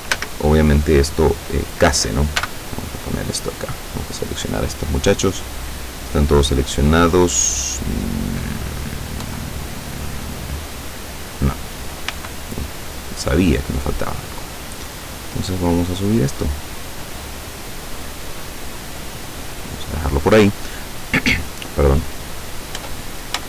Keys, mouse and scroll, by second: 0.2 a, 2.5 b, 3.4 click, 5.5-8.6 middle drag, 8.6-9.3 scroll up 1, 9.3-9.9 scroll up 1, 9.3 KP_7, 9.9-10.6 scroll up 1, 12.2 b, 12.9 click, 15.1-19.5 drag, 22.8 Tab.